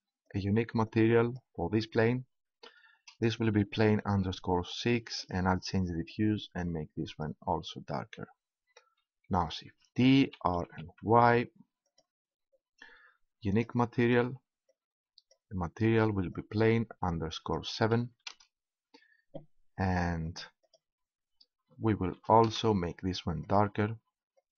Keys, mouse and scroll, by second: 5.2-7.0 drag, 9.6 shift+d, 11.9-15.8 drag, 20.3-22.1 drag, 23.4-24.5 drag.